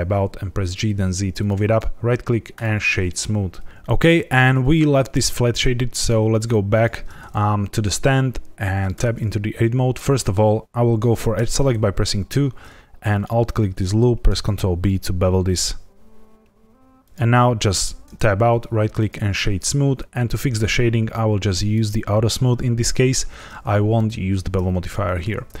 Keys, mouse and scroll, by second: 0.0 z, 1.3 click, 1.6 right click, 3.7 shift+middle click, 6.7 click, 8.9 Tab, 11.3 2, 13.0 alt+click, 14.2 ctrl+b, 17.0 click, 17.7 Tab, 18.4 right click, 21.7 click, 24.8 shift+middle click.